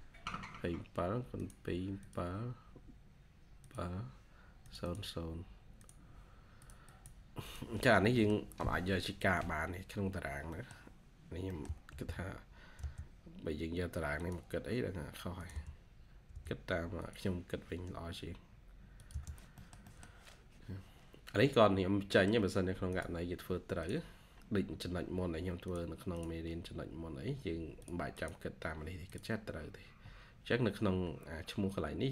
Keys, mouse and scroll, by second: 4.7 double click, 6.8 double click, 7.9 scroll down 1, 8.1 middle click, 9.5-10.0 scroll down 1, 10.0-10.4 scroll up 1, 10.4 middle click, 11.8 |, 15.4 space, 16.2 space, 19.0 space, 19.5 middle click, 21.0-21.9 scroll down 1, 22.3 middle click, 22.3 scroll up 1, 24.3-24.9 scroll up 1, 26.2 double click, 26.4-26.8 scroll up 1, 28.0 double click, 29.6-30.0 scroll down 1, 30.5-31.3 scroll up 1, 31.3-32.1 scroll down 1.